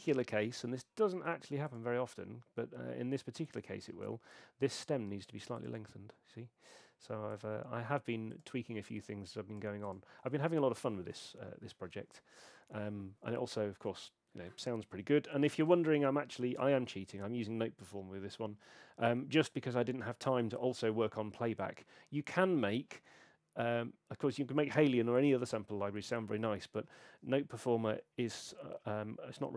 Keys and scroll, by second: 0.1 super+3, 15.7 super+2.